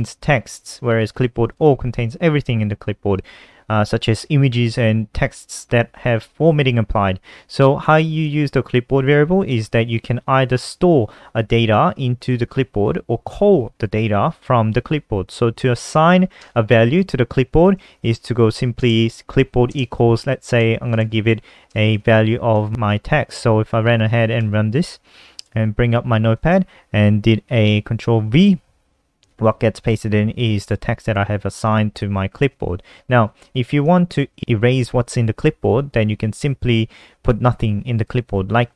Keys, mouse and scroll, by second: 0.0 click, 1.4 click, 1.6 click, 7.8 End, 8.0 shift+Home, 8.2 BackSpace, 15.4 Up, 16.4 Return, 17.7-23.8 typing, 24.4 F5, 25.5 super+n, 26.4 click, 28.2 ctrl+v, 30.7 click, 30.9 alt+F4, 31.2 n, 31.7 click, 33.3 Left, 33.5 Left, 34.0 ctrl+shift+Left, 34.1 ctrl+shift+Left.